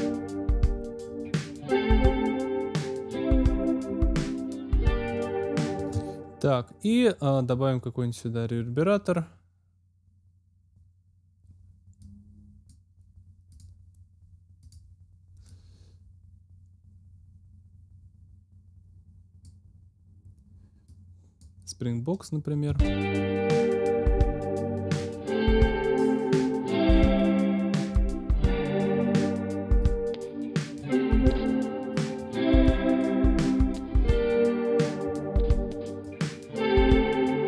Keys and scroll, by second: 5.7 space, 22.6 space.